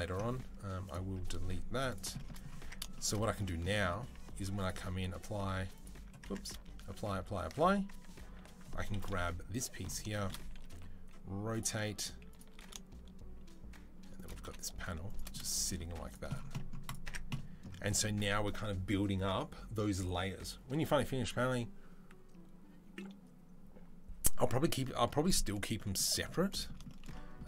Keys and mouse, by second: 0.6 click, 0.7-4.4 middle drag, 1.7 click, 2.4 Tab, 3.3 a, 3.9 Tab, 4.4 click, 4.5-6.0 ctrl+middle drag, 4.9 ctrl+a, 6.0 Tab, 6.6 ctrl+a, 6.9 ctrl+a, 7.2 ctrl+a, 7.7 Tab, 8.9 KP_3, 10.5 r, 11.4-15.9 shift+middle drag, 11.5 g, 12.3 r, 14.1 g, 15.7 z, 15.9-16.9 drag, 16.9 Tab, 16.9-27.4 middle drag.